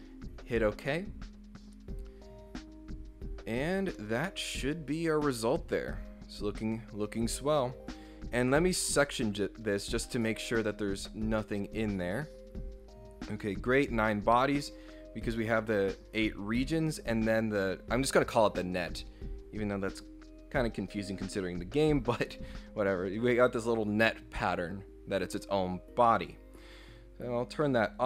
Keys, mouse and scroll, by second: 3.7 scroll up 2, 3.9-6.8 middle drag, 8.4 click, 10.1 click, 10.6 click, 14.1 middle click, 16.2 click, 19.9 click, 27.7 click.